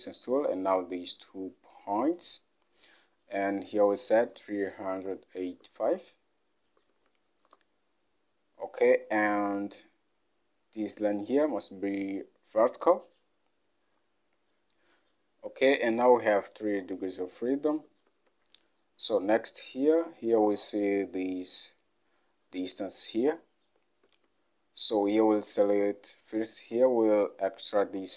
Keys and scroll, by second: 4.4-5.1 typing, 5.8 alt+Tab, 7.6 Return, 13.2 Return, 18.2 alt+Tab.